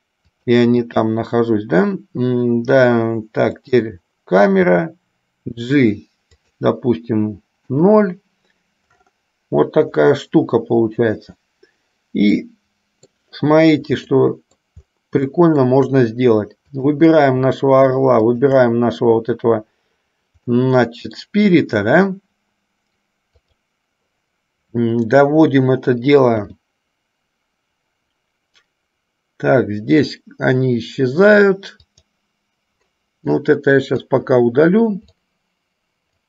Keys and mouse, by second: 0.5 click, 3.7 click, 4.9 g, 7.7 KP_0, 12.6-13.4 middle drag, 14.2 middle click, 15.6 shift+middle drag, 18.4 shift+click, 20.6-21.6 middle drag, 23.7 click, 26.6 g, 33.6 click, 35.2-36.2 drag.